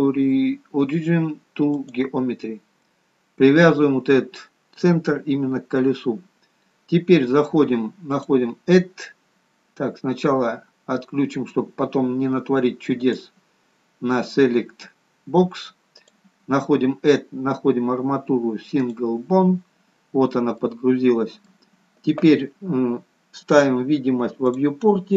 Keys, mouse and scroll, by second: 8.1 click, 12.9 click, 15.9 click, 20.6 middle click, 23.5 click.